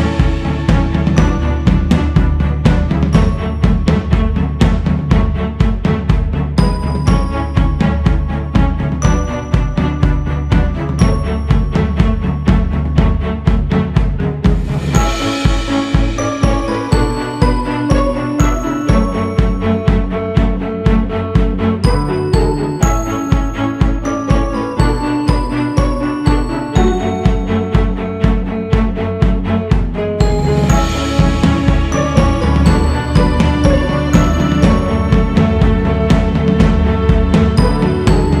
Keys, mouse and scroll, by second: 1.3-3.2 scroll down 17, 3.2 scroll up 3, 4.6-5.7 drag, 5.7 scroll up 2, 6.0-8.5 drag, 8.5 scroll down 2, 8.7-10.1 drag, 10.1-10.7 scroll down 4, 11.8 click, 12.6-13.1 scroll up 4, 13.1 click, 13.8-14.2 scroll up 3, 14.2 click, 14.9-15.3 scroll up 3, 15.3 click, 16.2 shift+c, 16.4 f, 18.3-19.8 drag, 19.8-21.3 scroll down 2, 21.3 click, 21.8-22.3 scroll up 4, 22.3 click, 23.1-23.5 scroll up 1, 23.5 shift+s, 24.0 f, 24.8-25.5 scroll up 2, 25.5-28.4 drag, 29.1 x, 30.6-33.9 drag, 33.9 shift+s, 34.2 f, 35.3-37.3 drag, 37.3-38.4 scroll down 10.